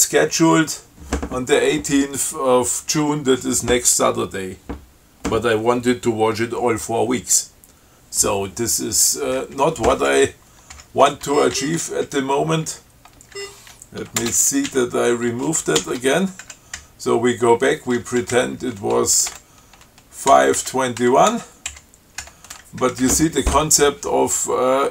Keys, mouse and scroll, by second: 10.2 Down, 11.0 Home, 11.7 shift+Down, 12.3 shift+Up, 12.9 Down, 13.6 shift+Down, 14.4 ctrl+space, 14.6 ctrl+Down, 16.0 ctrl+w, 16.7 ctrl+Up, 17.0 Right, 19.5 5, 20.5 Delete, 20.8 Right, 21.3 2, 21.5 1, 21.9 Delete, 23.0 Right.